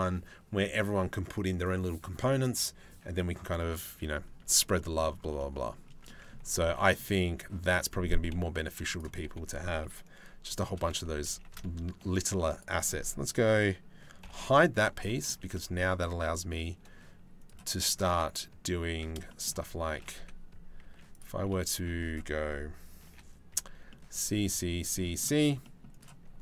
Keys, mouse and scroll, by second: 4.4 middle click, 5.0 middle click, 5.7 click, 6.3 click, 7.3 click, 10.3 shift+d, 10.9 g, 13.9 h, 14.7 middle click, 15.4 ctrl+r, 18.5 a, 18.9 shift+click, 19.8 2, 20.5 z, 21.4 1, 22.7 2, 23.2 c.